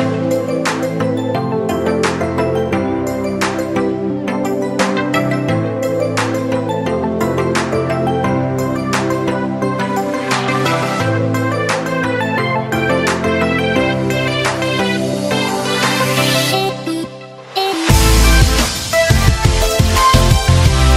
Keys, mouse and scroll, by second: 0.7-5.8 typing, 2.5 Return, 6.7-12.3 right drag, 12.3 Return, 13.4-17.2 typing, 15.3 Return, 19.0-20.4 typing.